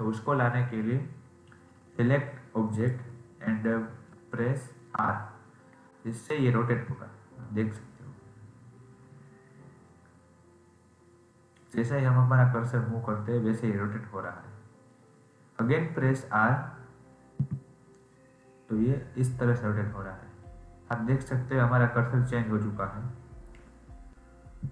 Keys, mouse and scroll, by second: 2.7 click.